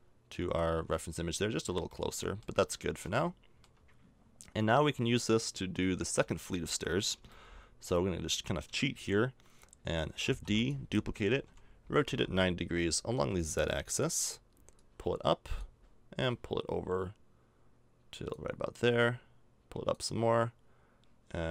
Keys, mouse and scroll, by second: 1.3 z, 2.7 click, 9.3 middle click, 10.2 shift+d, 11.4 r.